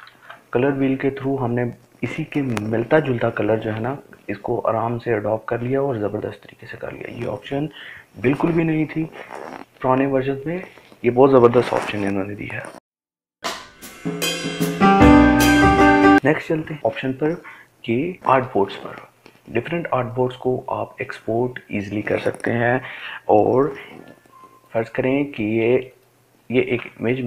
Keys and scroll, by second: 0.6 ctrl+d.